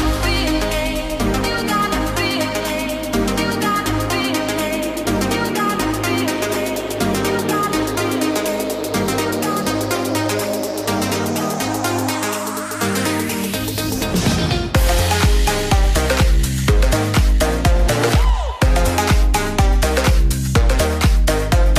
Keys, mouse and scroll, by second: 5.2 click.